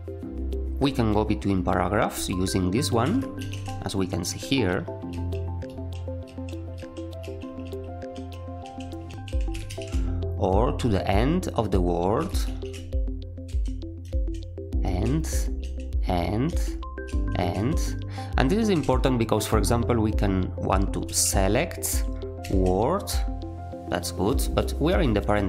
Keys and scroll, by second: 3.3 ctrl+alt+Up, 4.4-9.0 typing, 9.6 ctrl+alt+Down, 12.4 ctrl+alt+Up, 13.2-17.5 typing, 18.7 w, 21.0 v, 22.4 w.